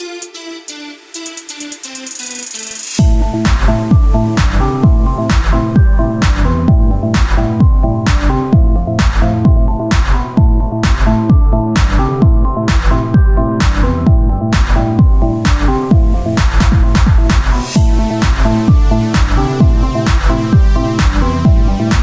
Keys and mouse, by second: 3.0 Tab, 3.6-5.1 drag, 5.1 KP_7, 7.0-8.9 drag, 9.0-10.8 middle drag, 10.8-16.5 right drag, 16.5-17.9 drag, 16.7 ctrl+z, 17.9 o, 18.7-19.9 drag.